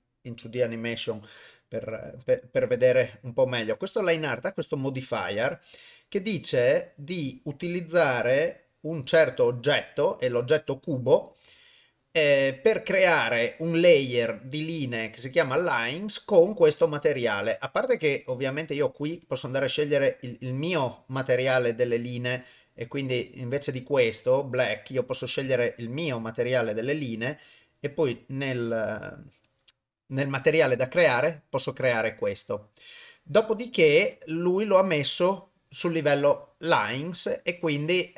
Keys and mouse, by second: 0.0 click, 3.4 click, 18.8 click, 19.2-21.2 drag, 22.4 click, 24.1 click, 28.0 click, 28.8 click.